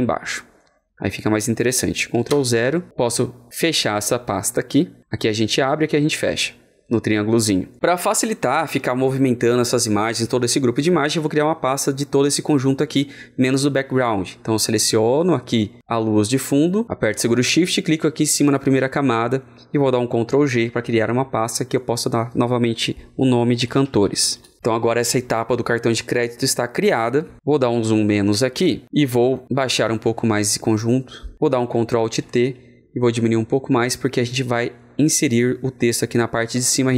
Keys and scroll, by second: 2.2 ctrl+KP_0, 17.8 ctrl+KP_0, 20.2 ctrl+shift+g, 27.8 ctrl+shift+g, 32.0 ctrl+alt+t.